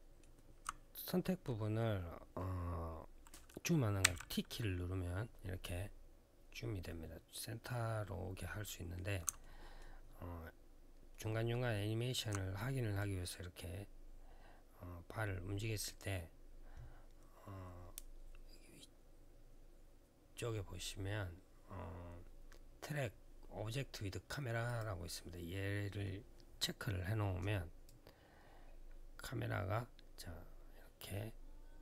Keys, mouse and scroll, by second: 9.2 alt+middle click, 9.7-10.9 alt+scroll down 1, 10.9 alt+middle click, 11.5 alt+middle click, 12.7 click, 24.4 click, 27.6 click.